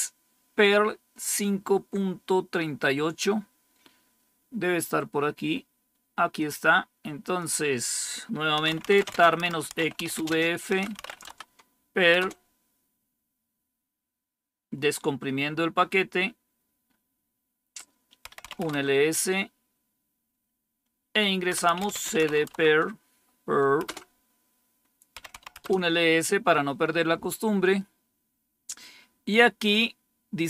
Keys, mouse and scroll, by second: 6.3-8.3 drag, 8.3-11.4 typing, 12.1 Return, 18.0-19.7 typing, 21.2-22.6 typing, 23.7 typing, 25.0-25.8 typing.